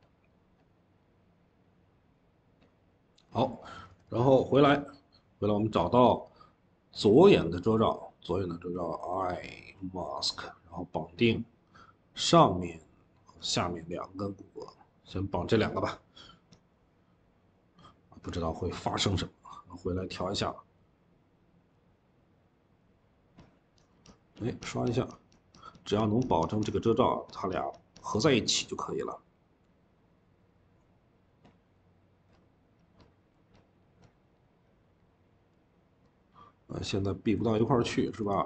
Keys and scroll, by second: 3.7 Escape, 3.7 Escape, 3.9 Escape, 37.5 Escape, 37.7 Escape.